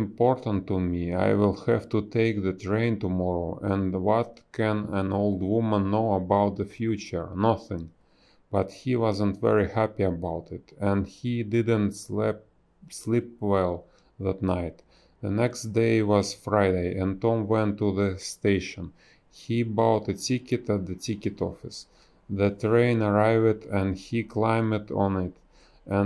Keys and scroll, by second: 1.0 space, 3.2 space, 3.5 b, 5.5 ctrl+z, 6.4 space, 7.0 space, 8.3 space, 12.0 a, 14.1 space, 16.2 space, 17.1 space, 17.8 b, 19.0 ctrl+z, 21.3 ctrl+z, 22.3 space, 24.4 ctrl+z, 24.5 space, 25.0 ctrl+z, 25.8 ctrl+z, 25.8 space.